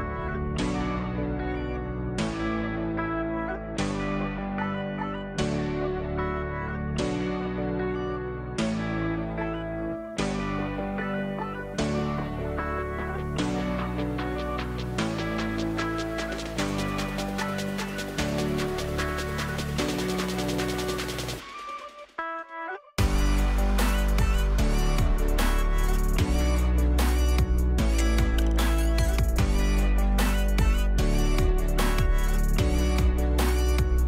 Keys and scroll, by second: 7.1 ctrl+shift+i, 19.9 ctrl+alt+d, 23.9 Delete, 25.9 ctrl+d, 28.7 space.